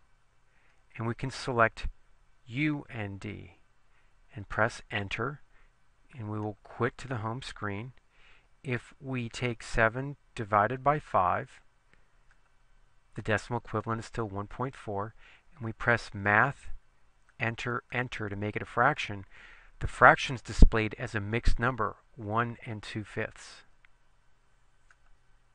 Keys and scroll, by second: 0.8 Down, 2.7 Right, 4.9 Return, 9.6 7, 11.6 5, 12.4 Return, 17.4 Return, 18.0 Return.